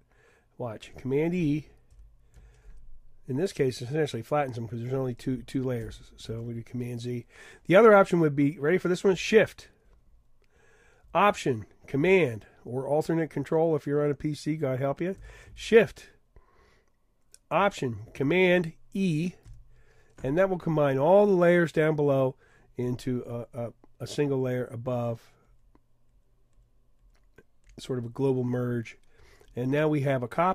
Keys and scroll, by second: 1.9 super+e, 5.8 super+z, 19.5 alt+shift+super+e.